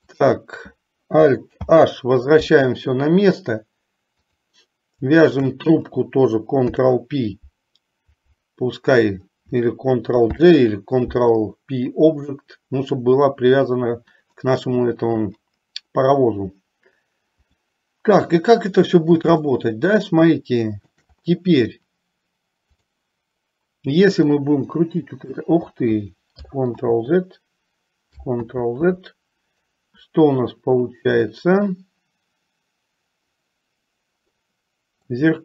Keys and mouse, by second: 0.2 click, 1.9 alt+h, 4.3 click, 5.5 shift+click, 6.7 ctrl+p, 10.4 ctrl+j, 13.6 click, 17.6 click, 19.7-21.2 shift+middle drag, 22.9 click, 24.5-25.6 drag, 26.6 ctrl+Left, 27.1 ctrl+z, 28.6 ctrl+z, 31.6-35.3 middle drag.